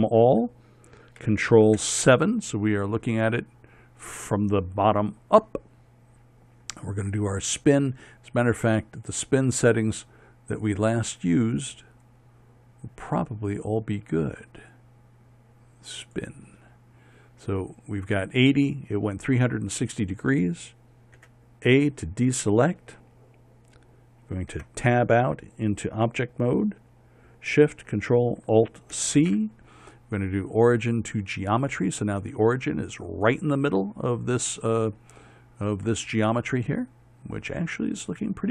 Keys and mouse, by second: 2.4 ctrl+KP_7, 3.5-4.9 middle drag, 21.8 a, 25.2 Tab, 29.6 ctrl+alt+shift+c.